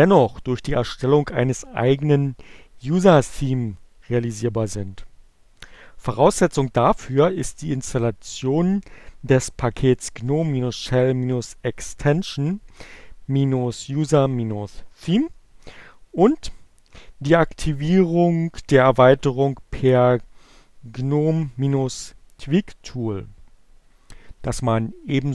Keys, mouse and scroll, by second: 7.7 click.